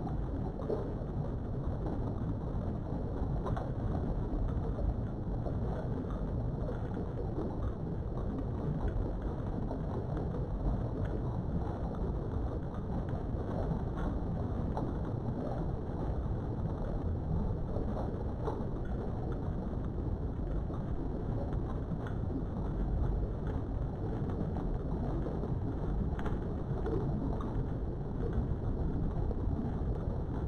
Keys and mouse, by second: 0.6 right click, 1.0 g, 1.4 x, 2.8 click, 3.5 click, 5.3 click, 5.8 g, 6.2 x, 7.4 click, 8.0 click, 8.9 g, 9.2 x, 10.3 click, 11.4 click, 12.1 g, 12.4 z, 13.2 right click, 13.7 g, 14.2 x, 15.3 click, 18.4 click, 19.3 g, 19.7 x, 21.6 click, 24.3 click, 24.8 g, 25.2 x, 25.9 click, 26.3 click, 26.8 g, 27.2 x, 27.7 click, 30.1-30.4 drag.